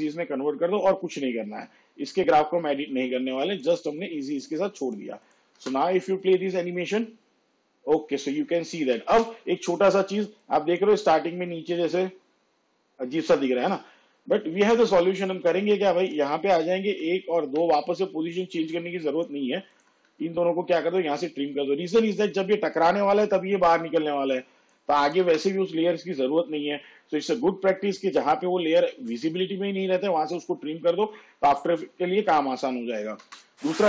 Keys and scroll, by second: 5.7 space, 9.2 space, 16.9 ctrl+Right, 20.9 alt+[, 25.3 space, 33.3 space.